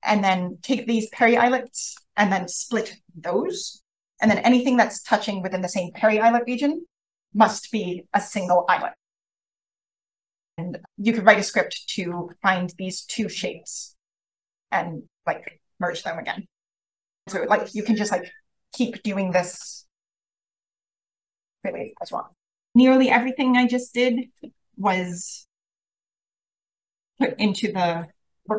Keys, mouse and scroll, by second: 1.0 click, 1.2 click, 1.6 click, 11.1-11.9 scroll up 1, 11.9 click, 11.9 scroll up 1, 12.1 click, 24.0 click, 24.5-24.9 scroll down 1, 26.5 click, 27.7 Down, 28.5 Down.